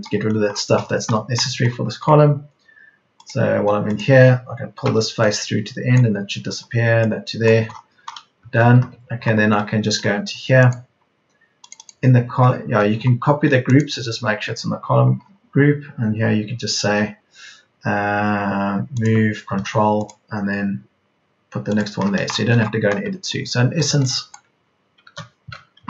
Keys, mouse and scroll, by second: 4.8 p, 8.5 Escape, 10.5 Escape, 22.7 space, 23.0 Escape, 23.7 Escape, 25.5 space, 25.7 Delete.